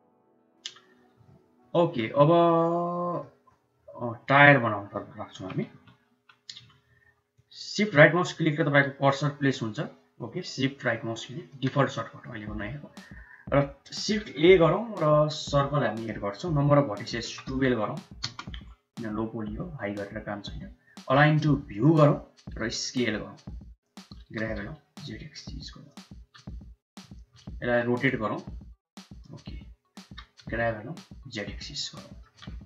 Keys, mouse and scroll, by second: 1.2 ctrl+s, 1.6-1.9 middle drag, 2.1 shift+middle click, 2.5-3.1 middle drag, 3.4-4.1 middle drag, 5.2 KP_1, 5.5 KP_3, 7.3-11.5 shift+middle drag, 14.1 shift+a, 17.0-18.4 drag, 20.9-21.8 drag, 22.5 s, 24.1 g, 26.0 s, 27.6 r, 30.0 g, 31.9 shift+drag.